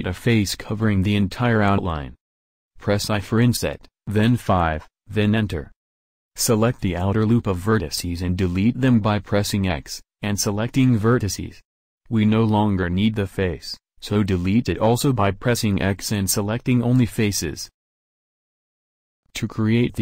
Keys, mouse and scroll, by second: 3.0 i, 6.5 a, 7.1-8.3 drag, 7.4 x, 12.3 a, 13.0 x.